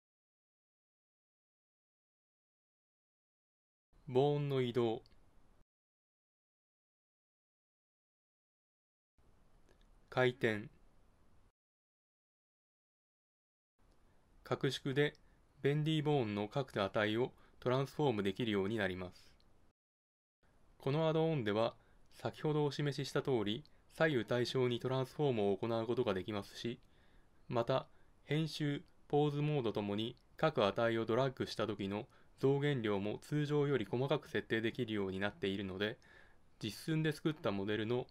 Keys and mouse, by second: 4.3 middle click, 4.6 click, 5.8 middle click, 6.0 middle click, 6.1 middle click, 7.2 click, 7.6 middle click, 7.7 click, 7.9 middle click, 8.3 middle click, 8.5 middle click, 8.7 middle click, 9.7 middle click, 10.6 click, 11.5 click, 11.6-12.6 middle drag, 13.9 s, 18.3 g, 19.9 g, 21.8 click, 23.1 click, 23.3 click, 23.4 middle click, 23.7 s, 26.3 g, 28.4 g, 30.2 g, 31.8 g, 33.6 s, 35.6-36.7 drag.